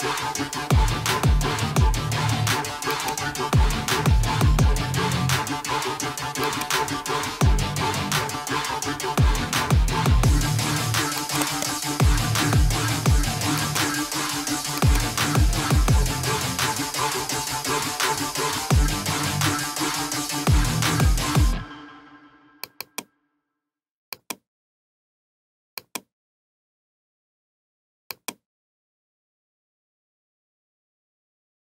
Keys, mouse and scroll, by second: 2.0 click, 4.1 click, 6.5 click, 11.3 click, 11.6 click, 13.7 click, 14.9 click, 15.4-16.8 typing, 17.6 scroll down 1, 17.7 scroll, 18.4 scroll, 18.9 scroll, 22.2 scroll down 4, 22.7 click, 22.9 click, 25.2 click, 27.4 click, 29.7 click, 31.6 scroll down 2.